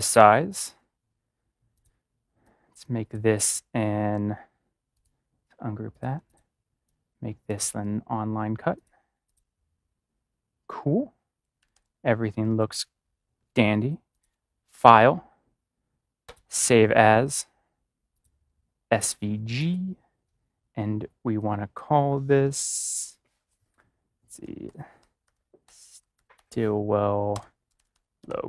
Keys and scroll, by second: 11.5 ctrl+=, 24.6-28.2 typing.